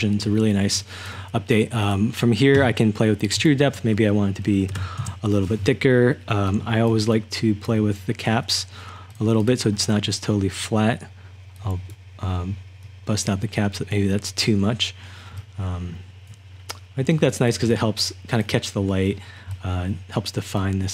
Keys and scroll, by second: 0.0-0.7 typing, 4.7-5.5 typing, 6.7-8.1 typing, 15.3-20.9 typing.